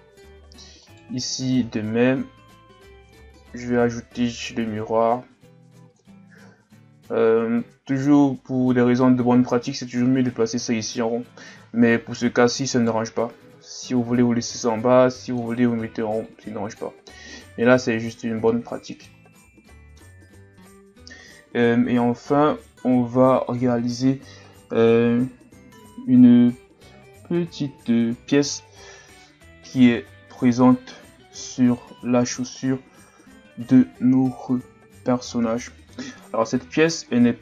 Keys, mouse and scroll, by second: 0.0-0.9 scroll down 3, 0.9 right click, 1.9-2.6 scroll up 2, 2.6-3.0 scroll up 1, 3.0 click, 6.0 click, 8.0 click, 12.7 right click, 15.3 click, 18.0 a, 18.5-19.4 middle drag, 19.4 scroll down 1, 19.6-22.7 middle drag.